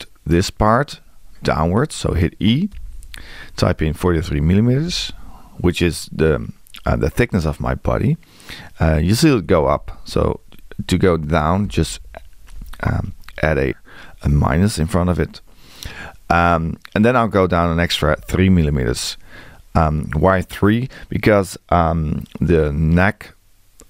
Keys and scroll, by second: 2.7 e, 9.5 Left, 18.1 space.